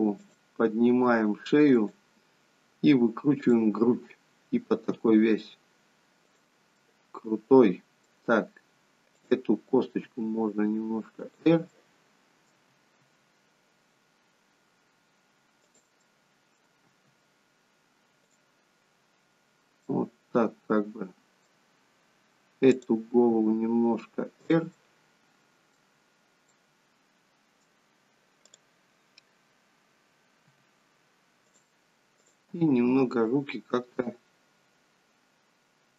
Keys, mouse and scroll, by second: 0.3 click, 0.9 r, 3.4 click, 5.0 r, 6.7 middle click, 9.2 click, 10.2 r, 11.8 middle click, 12.7 r, 16.1 middle click, 16.9 r, 20.0 middle click, 22.7 click, 23.1 r, 24.7 middle click, 26.5 middle click, 28.5 click, 30.7 g, 32.2 click, 32.5 g.